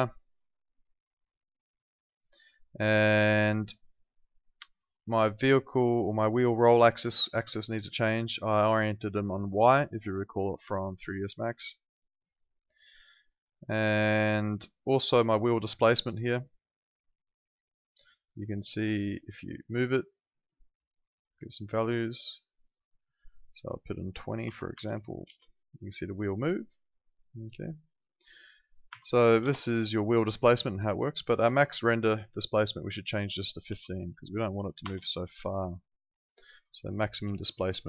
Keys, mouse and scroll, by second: 1.0 click, 6.7 click, 11.6 click, 15.6 click, 19.3 click, 23.5 click, 24.5 3, 24.8 0, 25.3 Return, 26.7 click, 28.9 0, 29.4 Return, 32.9 click, 33.7 1, 34.6 5, 34.9 Return, 36.2 click.